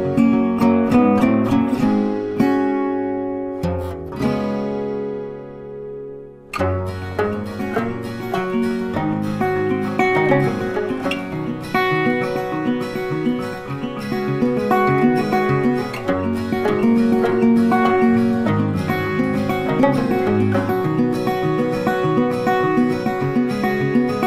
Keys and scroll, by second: 5.9 ctrl+a, 9.0 ctrl+d.